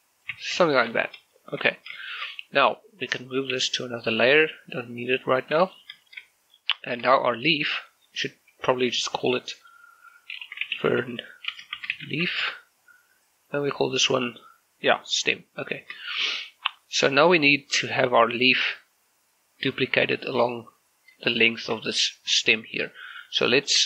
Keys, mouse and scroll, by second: 0.4 Tab, 0.7 shift+middle click, 1.1 scroll up 1, 1.4 shift+middle click, 1.8 scroll down 1, 2.1 shift+middle click, 3.6 m, 5.0 click, 5.4 scroll down 1, 5.8 shift+middle click, 6.0 scroll up 1, 6.6 shift+middle click, 7.2 right click, 9.2 click, 10.5-12.3 typing, 12.5 Return, 13.5 right click, 16.4-19.4 shift+middle drag, 19.8-21.5 shift+middle drag, 22.6 shift+middle click, 23.5 shift+middle click.